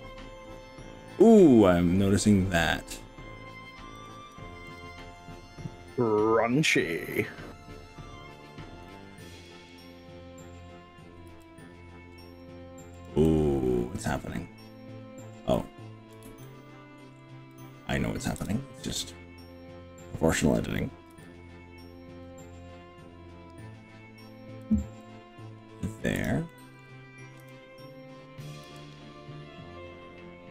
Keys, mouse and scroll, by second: 1.2-2.3 middle drag, 2.9 scroll up 2, 4.1 click, 4.7 shift+click, 6.9 KP_3, 7.9 scroll down 2, 8.9 shift+middle click, 9.7-10.3 scroll up 4, 11.3 g, 13.1 click, 13.2-16.1 middle drag, 16.3 ctrl+z, 16.9 scroll up 2, 17.1 scroll down 2, 17.5 middle click, 18.5 KP_3, 21.1 g, 21.9-22.8 scroll up 7, 23.3 scroll up 2, 24.7 click, 25.0 middle click, 26.3 click, 26.5 middle click, 27.5 KP_3, 28.7 g.